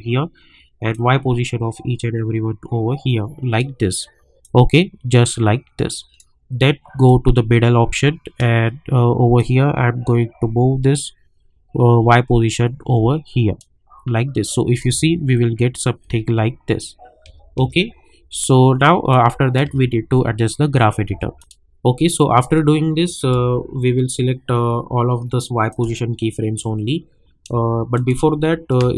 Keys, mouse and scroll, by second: 15.0 space, 19.1 click, 19.6 space, 21.3-23.9 drag, 23.9 scroll down 1, 25.7 click, 26.3 scroll up 1, 27.9 shift+click, 28.8 space.